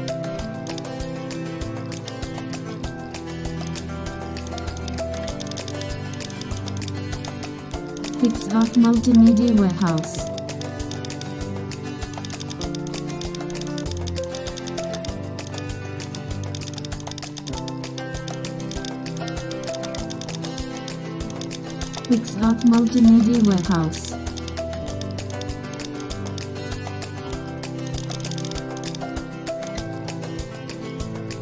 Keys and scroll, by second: 2.8 super+e, 24.8 super+space, 29.1 super+0.